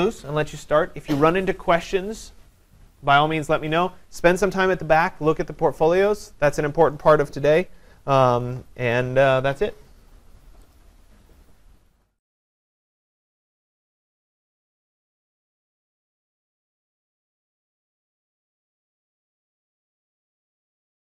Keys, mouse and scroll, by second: 10.8 click, 11.3 click.